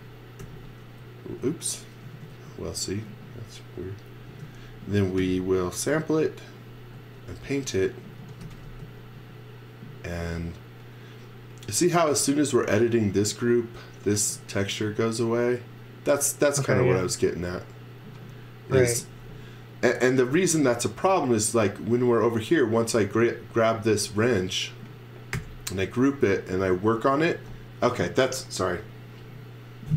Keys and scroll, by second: 0.4 n, 2.3 super+z, 4.3 space, 5.2 n, 7.9-8.9 typing, 18.9 x, 21.0 x, 21.0 space, 25.3 g.